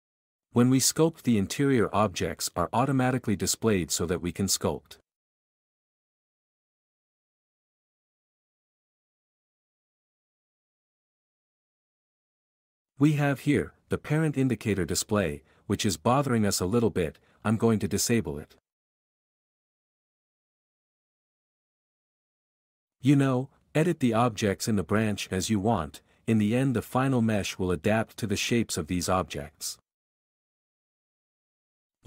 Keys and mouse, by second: 0.0 f, 0.8 v, 1.1 v, 3.1 Tab, 4.0 Tab, 7.8-11.1 typing, 7.9 Tab, 10.9 Tab, 11.1 click, 12.9 Tab, 16.5 alt+click, 17.6 click, 19.2 v, 19.2 f, 19.5 v, 19.6 v, 20.9 click, 21.3 q, 21.8 q, 23.0 Tab, 23.3 v, 23.5 f, 23.6 g, 25.3 f, 25.6-26.8 drag, 27.7 Tab, 28.1 v, 28.3 q, 30.3 Tab, 30.8 ctrl+r, 30.9 click, 31.3-32.0 typing, 31.9 ctrl+r.